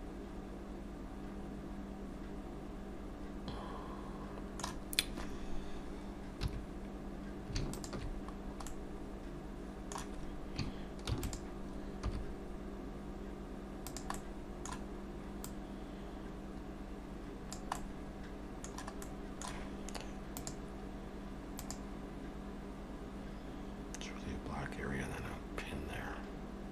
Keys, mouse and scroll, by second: 6.3 2, 7.8 alt+shift+click, 8.4 scroll down 1, 8.7 middle click, 11.1 shift+d, 12.1 s, 14.2 middle click, 15.5 click, 17.8 middle click, 19.0 middle click.